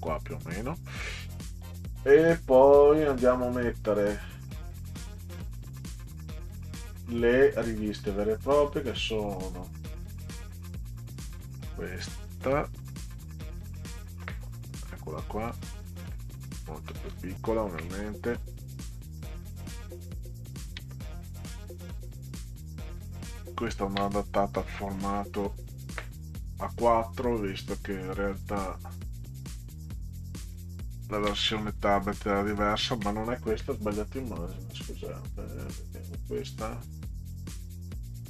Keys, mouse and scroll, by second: 0.4 click, 3.7 click, 10.5 click, 11.0 click, 15.5 click, 17.5 ctrl+scroll down 2, 19.2-20.6 drag, 21.2 click, 23.0 ctrl+click, 24.8 middle click, 28.4 click, 29.7 click, 30.7 ctrl+scroll up 2, 32.8 ctrl+scroll down 2, 36.1-38.2 drag.